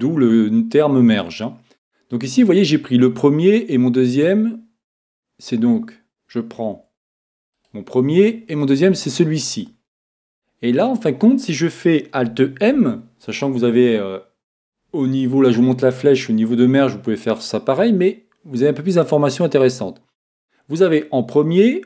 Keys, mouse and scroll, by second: 4.9-6.8 right drag, 7.5-10.3 right drag, 12.7 alt+m, 13.4 alt+m.